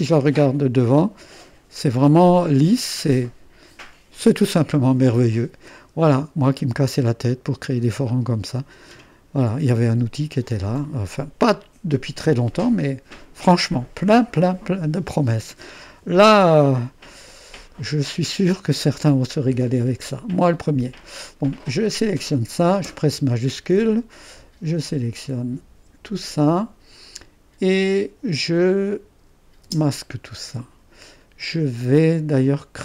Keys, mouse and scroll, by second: 0.9-4.5 drag, 2.8 typing, 5.1 click, 8.2 typing, 9.7 typing, 21.6 click, 26.2-27.2 drag, 29.7 space.